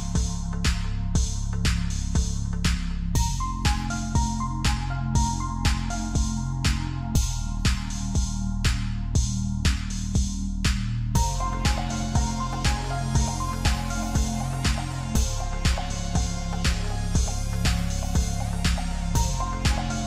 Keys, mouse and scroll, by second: 15.4 right click, 18.1 right click.